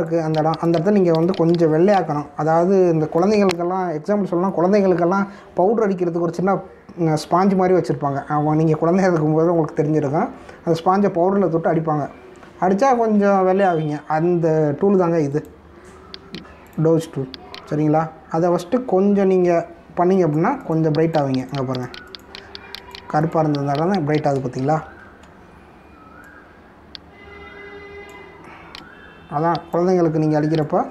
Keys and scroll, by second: 2.9 ctrl+-, 19.9 ], 25.6 ctrl+-.